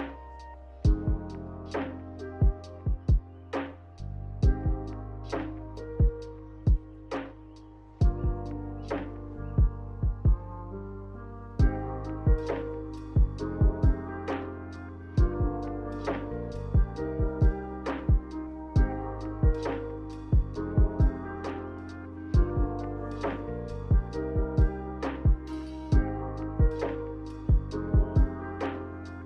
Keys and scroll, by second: 5.7 ctrl+h, 6.4 ctrl+h, 17.3 z, 25.6-26.6 typing, 27.8 1.